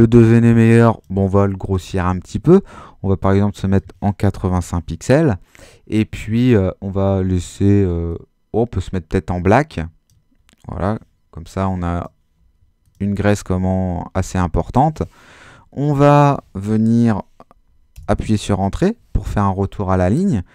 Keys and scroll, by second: 4.1-5.0 typing, 17.9 Return.